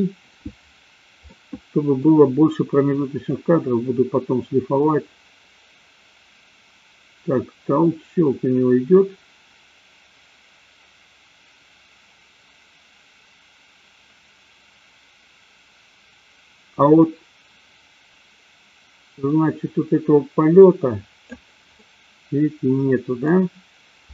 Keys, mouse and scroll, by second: 1.3 middle click, 3.6-21.6 drag, 21.8-23.3 middle drag.